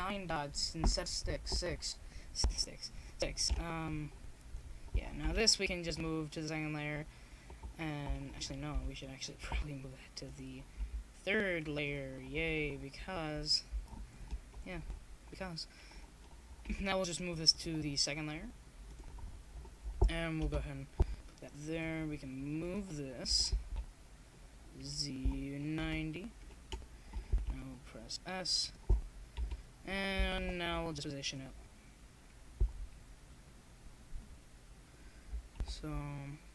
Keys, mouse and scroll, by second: 16.1-17.7 right drag, 17.7 click, 18.0-21.2 middle drag, 29.1-36.4 drag.